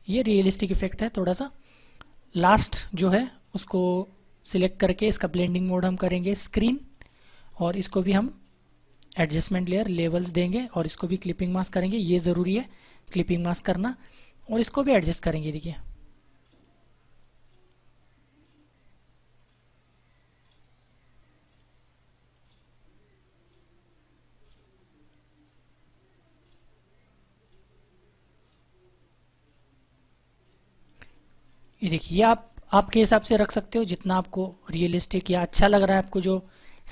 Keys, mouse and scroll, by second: 2.6 click, 14.5 click.